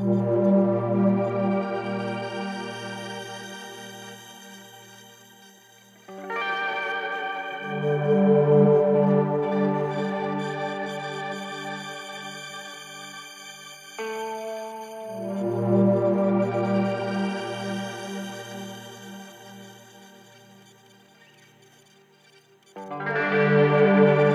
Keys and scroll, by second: 7.1 3, 7.8 Delete, 15.9 Delete.